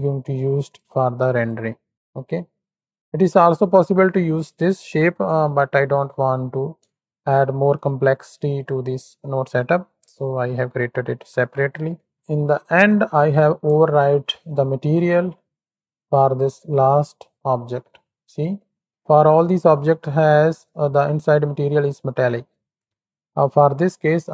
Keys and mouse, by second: 0.6-0.9 drag, 1.3 click, 2.2 click, 2.9 click, 3.7 click, 4.7-5.1 ctrl+shift+drag, 6.2 drag, 6.9-7.4 shift+drag, 7.9 click, 9.4 click, 10.3 click, 12.1 click, 12.7 ctrl+shift+click, 13.9 shift+middle click, 14.4 middle click, 15.0 shift+middle click, 15.5 z, 17.6 middle click, 18.4 shift+middle click, 21.9-22.4 middle drag, 22.7-23.5 shift+middle drag, 24.0-24.3 middle drag, 24.1-24.3 drag.